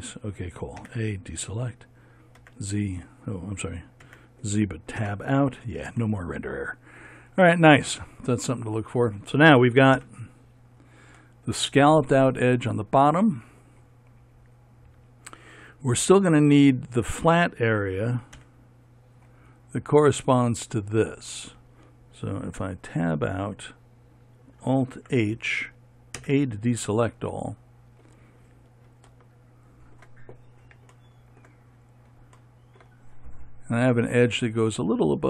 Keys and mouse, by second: 0.2 f, 1.3 a, 2.9 z, 4.6 z, 5.6 Tab, 10.5 KP_1, 18.9 KP_1, 23.0 Tab, 25.4 alt+h, 26.7 a.